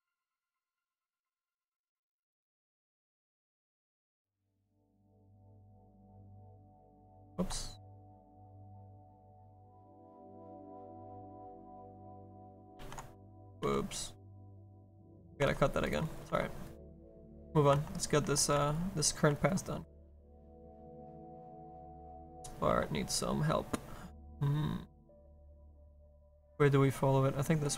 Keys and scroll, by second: 2.3 s, 7.2 ctrl+z, 13.2 s, 13.6 s, 20.7 s, 22.0 s.